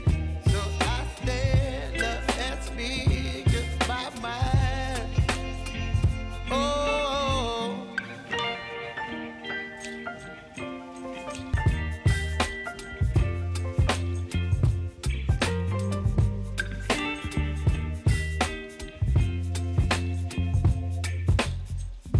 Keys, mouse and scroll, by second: 9.7 ctrl+x, 10.7 click, 11.7 ctrl+v, 12.9-15.5 drag, 17.3 right click, 18.1 click, 20.6-22.1 shift+drag.